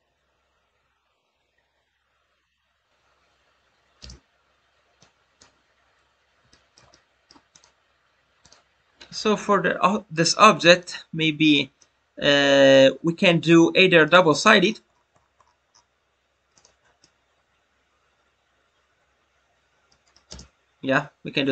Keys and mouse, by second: 4.9-5.3 drag, 6.4-6.8 middle drag, 6.9-7.3 middle drag, 7.5 click, 8.3 click, 11.7-12.8 middle drag, 16.5 click, 17.0-20.1 middle drag.